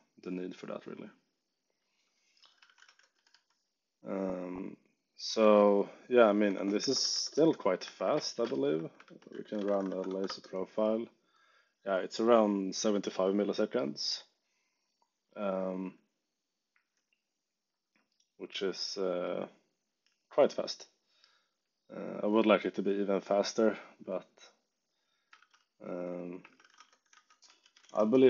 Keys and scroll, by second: 0.0-0.5 typing, 2.3-3.6 typing, 5.3 ctrl+Tab, 6.5 ctrl+shift+Tab, 6.5-10.2 typing, 7.8 Escape, 25.3-28.2 typing, 25.8 Escape.